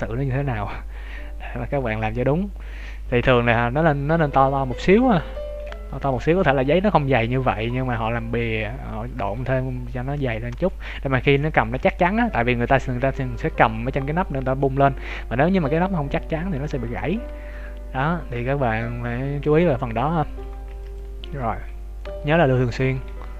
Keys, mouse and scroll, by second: 6.0 middle click, 7.2 shift+middle click, 7.6 middle click, 9.5 scroll up 2, 10.5 scroll down 1, 17.1-17.6 scroll down 2, 17.5 middle click, 20.6 ctrl+s, 21.4 middle click, 23.0 KP_1.